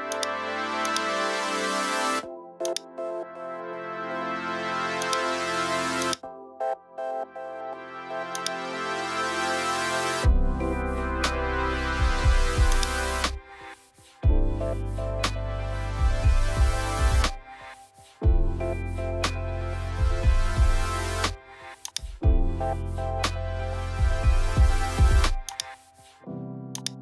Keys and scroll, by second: 15.0 super+i.